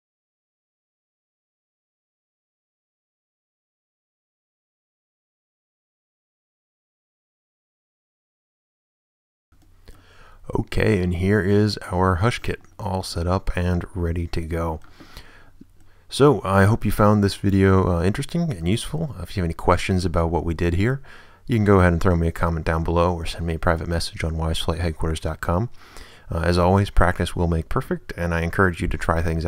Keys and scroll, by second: 4.1 Return, 4.5 a, 5.3 a, 6.4 Return, 6.7 a, 7.4 a, 8.2 Return, 8.5 a, 9.2 a.